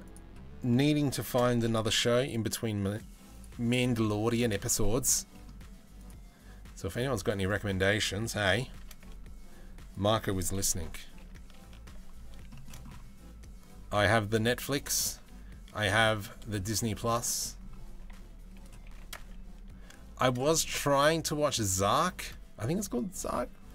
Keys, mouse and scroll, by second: 0.9 shift+d, 3.5 middle click, 4.3 middle click, 6.9 middle click, 7.8 middle click, 8.4 shift+d, 10.3 KP_3, 10.8 KP_1, 11.3 ctrl+KP_1, 12.2-13.5 shift+middle drag, 13.5 g, 15.9-16.2 middle drag, 16.9 middle click, 17.6 z, 18.5 g, 20.5-21.7 middle drag.